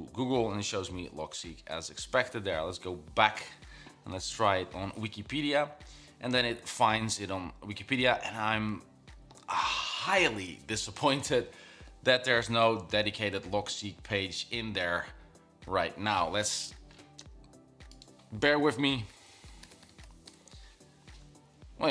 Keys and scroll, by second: 4.0-4.9 typing, 18.7-20.3 typing.